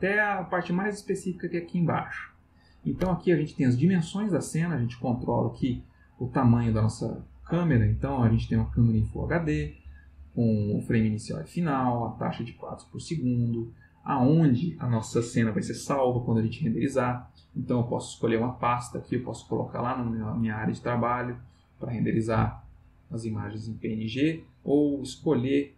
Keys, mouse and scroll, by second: 18.1 click, 20.0 click, 21.2 click, 24.7 click.